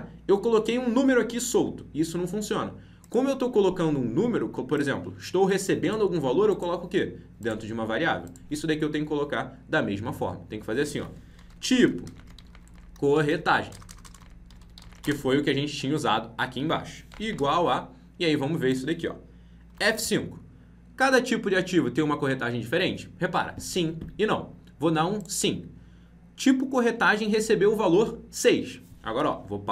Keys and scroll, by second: 19.6 F5.